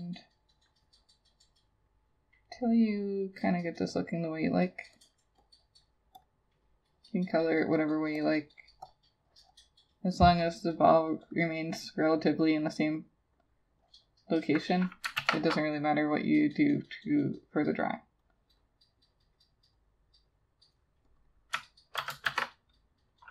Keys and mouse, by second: 5.1 double click, 15.2 ctrl+z, 21.2 double click, 22.0 ctrl+c, 22.3 ctrl+shift+v.